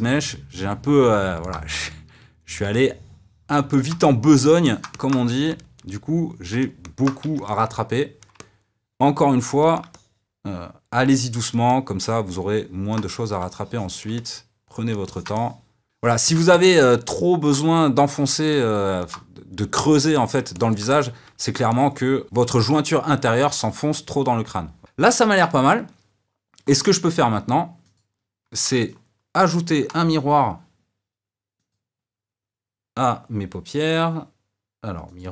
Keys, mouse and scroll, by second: 0.0 f, 0.2 click, 0.5-4.8 middle drag, 5.3 f, 5.5 click, 5.6 middle click, 6.1 f, 6.3 click, 7.1 middle click, 8.6 middle click, 8.9 click, 9.3 middle click, 9.5 click, 9.6 middle click, 10.0 f, 10.3 click, 10.6 middle click, 11.3 middle click, 11.7 click, 11.9-13.9 middle drag, 13.7 f, 13.9 click, 14.2 middle click, 14.3 f, 14.5 click, 15.5-16.6 shift+middle drag, 16.6 click, 17.2 ctrl+middle click, 17.8 f, 18.0 click, 18.4 middle click, 18.7 click, 19.0-20.8 middle drag, 21.1 click, 21.2-23.9 middle drag, 23.9 click, 24.1-27.9 shift+middle drag, 27.9 click, 28.8-30.3 middle drag, 30.3 click.